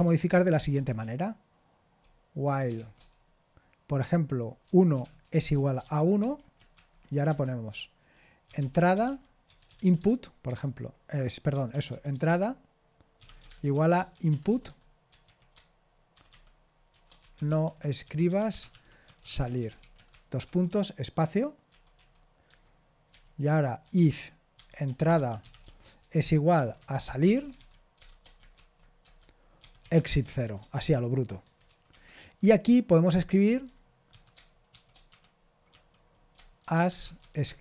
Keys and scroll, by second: 0.7-3.2 typing, 5.4-9.8 typing, 11.4-21.7 typing, 20.7 Escape, 23.2-32.2 typing, 31.9 Escape, 33.8-37.6 typing, 35.1 Escape.